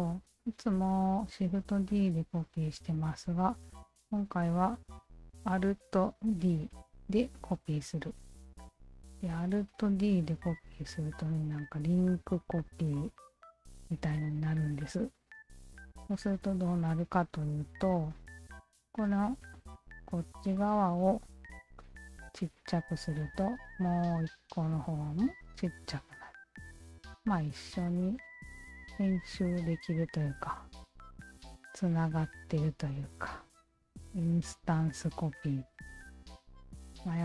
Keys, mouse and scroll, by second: 2.0 alt+click, 3.7 q, 6.4 alt+d, 7.6 right click, 9.0 w, 9.3-9.9 alt+drag, 10.8-12.3 alt+drag, 12.6 alt+click, 13.0-13.6 alt+drag, 15.3 alt+click, 16.1 alt+click, 16.9-17.8 alt+drag, 18.6 Tab, 19.3 alt+click, 22.0 r, 22.7-25.3 shift+drag, 26.1 Tab, 26.6-27.0 alt+drag, 27.3 alt+click, 27.9 alt+click, 28.5 w, 28.9-29.6 alt+middle drag, 29.6-30.0 alt+right drag, 30.8-31.7 drag, 32.5 e, 33.1-34.6 drag, 35.0 w, 35.4 alt+middle drag, 36.3-37.2 drag.